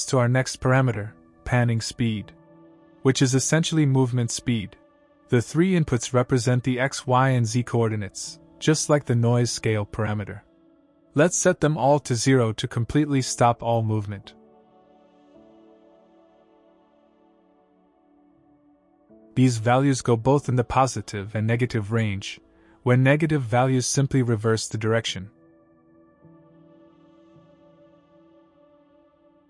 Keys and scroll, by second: 6.3 KP_0, 8.5 KP_0, 8.9 Return.